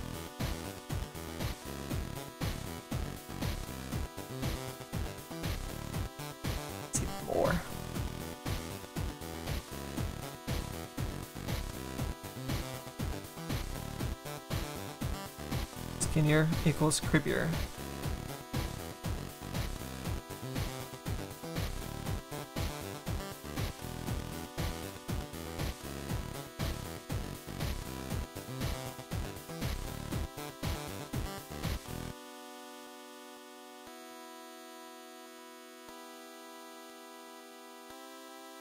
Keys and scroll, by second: 20.7 s.